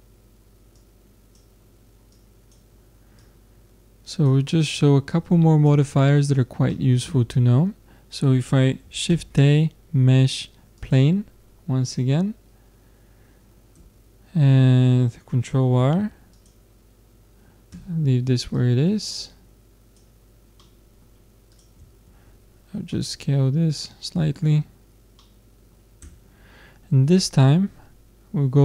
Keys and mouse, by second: 0.8-4.9 drag, 5.1-6.7 drag, 6.7-8.5 middle drag, 9.1 shift+a, 12.7-15.0 middle drag, 13.8 Tab, 15.8 ctrl+r, 18.6-20.3 drag, 20.6 middle click, 21.5 middle click, 22.4-23.5 drag, 24.0-25.8 middle drag, 26.0 Tab, 26.9 middle click.